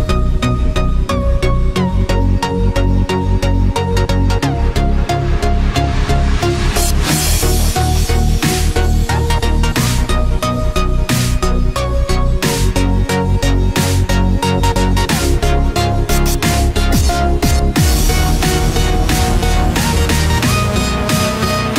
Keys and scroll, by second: 7.8 ctrl+-, 8.5 ctrl+=, 10.6 ctrl+-, 12.9 ctrl+=, 13.2 ctrl+space, 14.2 ctrl+=, 19.1 ctrl+-.